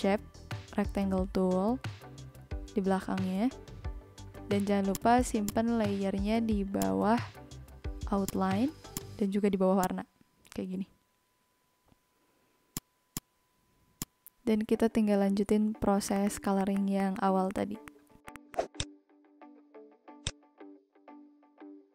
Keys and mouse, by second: 4.9 click, 6.7 click, 8.2 click, 9.7 click, 12.7 click, 13.9 click, 15.3 ctrl+s, 16.0 click, 16.6 click, 16.7 click, 17.0 click, 17.2 click, 17.5 click, 17.8 click, 19.0 click, 20.1 shift+click.